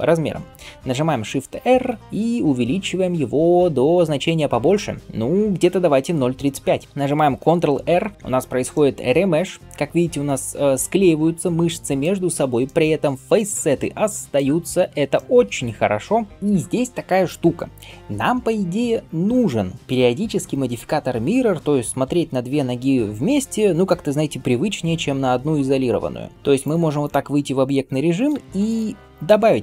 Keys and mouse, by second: 1.4 shift+r, 5.0 shift+r, 8.1 ctrl+r, 27.6 ctrl+space, 28.3 ctrl+space.